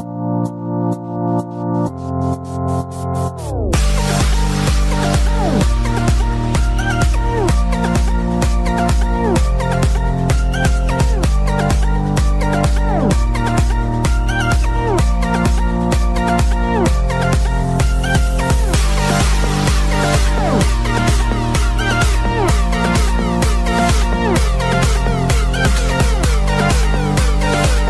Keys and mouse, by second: 0.1 Return, 0.1 shift+Page_Down, 0.1 click, 0.1 KP_1, 1.1 shift+Page_Down, 1.1 Return, 1.1 click, 1.1 KP_1, 1.6 Return, 1.6 click, 1.6 KP_1, 2.6 click, 3.6 KP_0, 3.6 Return, 7.5 click, 8.0 Return, 8.0 click, 8.0 space, 8.0 u, 8.0 KP_0, 11.0 click, 12.8 click, 12.8 space, 16.3 click, 17.8 click, 19.0 click, 22.2 click, 23.1 ctrl+d, 23.1 click, 23.9 click, 27.1 Return, 27.1 ctrl+d, 27.1 click, 27.1 BackSpace.